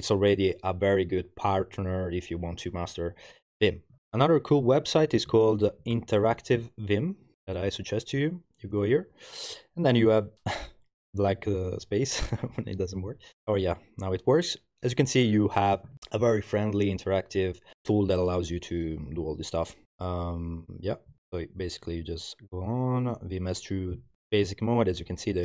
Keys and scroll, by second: 5.0-6.7 typing, 6.7 Return, 21.2 Return, 21.9 Return.